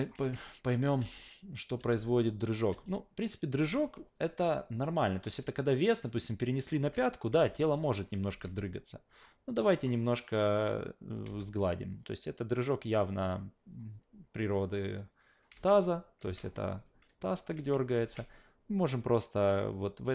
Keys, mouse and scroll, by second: 0.1 alt+v, 0.8 click, 1.0 alt+v, 1.8 alt+v, 2.5 click, 2.7 alt+v, 3.5 alt+v, 3.9 click, 4.1 alt+right drag, 4.4 alt+middle click, 4.9 alt+middle drag, 5.2 alt+v, 6.8 alt+v, 7.1 click, 7.3 alt+v, 8.3 alt+v, 8.7 click, 9.3 alt+middle drag, 9.8 alt+middle click, 10.7-11.1 drag, 11.2 f, 11.9 click, 13.7 click, 14.5-15.4 drag, 16.2 alt+v, 16.5 alt+middle drag, 17.4 click, 17.6 alt+v, 18.0 alt+v, 18.8-20.1 drag.